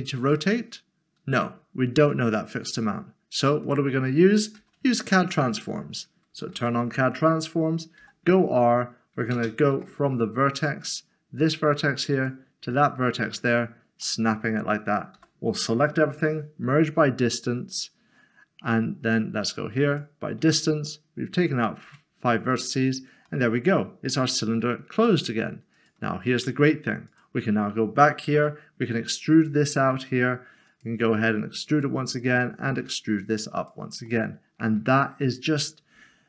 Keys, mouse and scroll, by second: 4.6 ctrl+z, 6.5 alt+c, 8.4 typing, 9.7 typing, 10.8 click, 14.0 middle click, 15.2-16.1 typing, 19.9 typing, 20.7 click, 21.8 Tab, 22.7 middle click, 24.1 shift+middle click, 25.0 click, 26.3 Tab, 27.1 Tab, 30.7 e, 31.7 e, 32.2 double click, 32.8 e, 33.6 click, 34.1 middle click, 36.0 Tab.